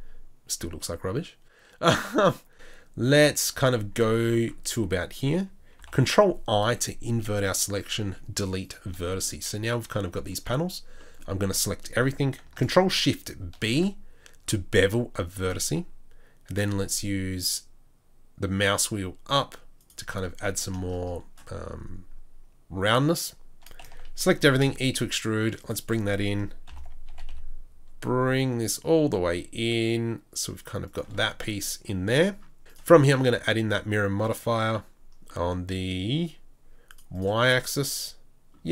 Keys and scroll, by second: 5.8 ctrl+i, 8.0 Delete, 10.4 Delete, 10.4 a, 23.8 a, 24.4 e, 26.7 ctrl+l, 27.1 g.